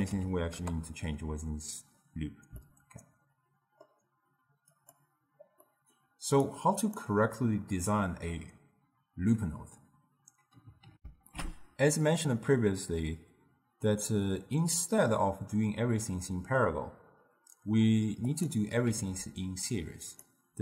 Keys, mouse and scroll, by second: 2.7-4.8 middle drag, 4.8-5.7 drag, 5.7-6.5 middle drag, 6.5-9.6 drag, 11.0 ctrl+alt+shift+q, 18.4 click, 19.0 shift+d.